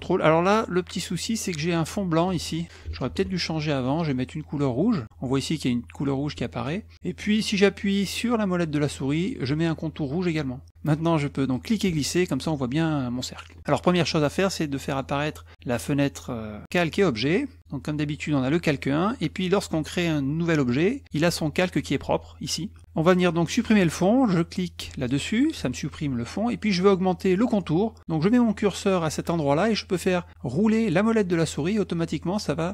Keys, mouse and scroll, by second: 3.1 ctrl+z, 5.0 click, 8.9 middle click, 11.5-13.5 drag, 14.9 click, 15.7 click.